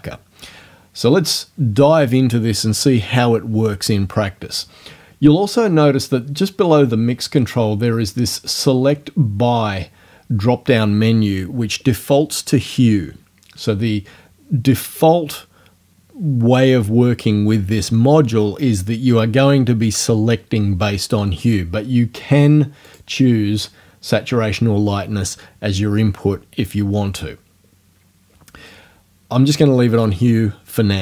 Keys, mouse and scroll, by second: 22.9 click.